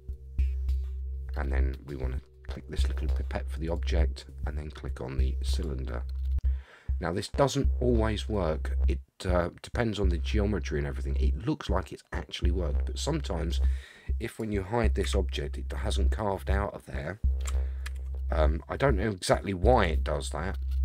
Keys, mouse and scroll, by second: 3.6 click, 8.3-13.5 middle drag, 14.3 click, 15.0 h, 17.8 ctrl+z, 19.7 click, 20.7-20.8 middle drag.